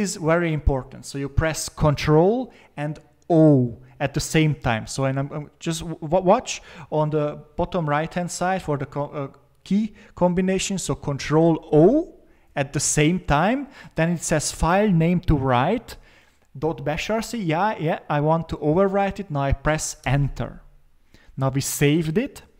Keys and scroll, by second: 11.7 ctrl+o, 20.0 Return.